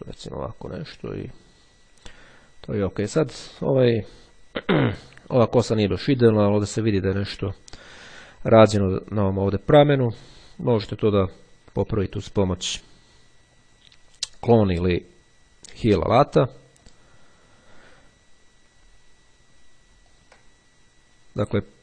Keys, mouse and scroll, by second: 3.1-3.7 ctrl+scroll up 2, 5.7 click, 10.2-10.7 scroll down 2, 10.7-11.3 scroll up 2, 15.8-17.6 drag, 20.3 ctrl+click.